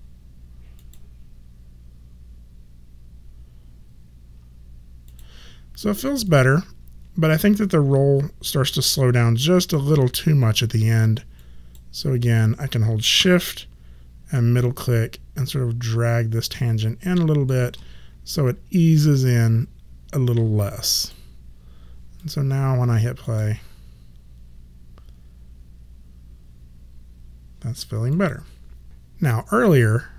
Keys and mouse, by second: 5.0 click, 9.6 click, 14.5 shift+middle click, 21.0 click, 28.1 click.